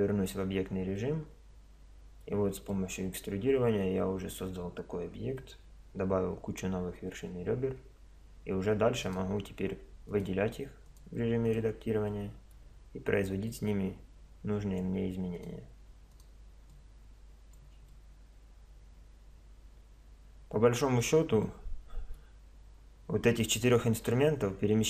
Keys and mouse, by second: 0.0 Tab, 1.0-4.6 middle drag, 6.4 Tab, 7.8 Tab, 8.4 Tab, 9.0-12.1 drag, 12.1-14.8 middle drag, 14.8 click, 15.4-20.0 middle drag, 21.4-23.4 middle drag.